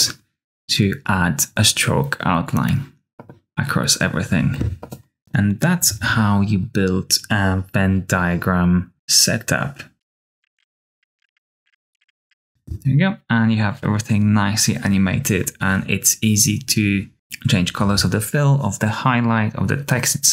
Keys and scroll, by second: 10.4-12.7 typing, 10.9 Tab, 11.0 super+w, 11.1 F9, 11.3 super+c.